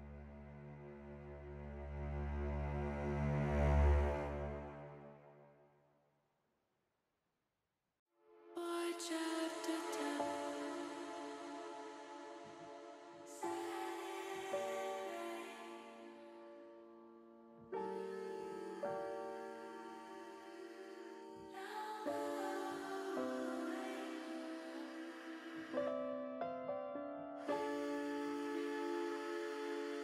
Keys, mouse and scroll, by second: 2.2-4.1 middle drag, 5.7 shift+middle click, 7.8 click, 11.0 click, 12.1 shift+click, 12.5 shift+click, 12.9 shift+click, 13.8 shift+click, 14.3 middle click, 17.6 s, 18.7 y, 21.2 click, 21.5 middle click, 22.7 middle click, 23.0 middle click, 24.3 s, 24.8 y, 25.7 click, 27.5 ctrl+z, 28.2 middle click, 29.0 s, 29.4 y.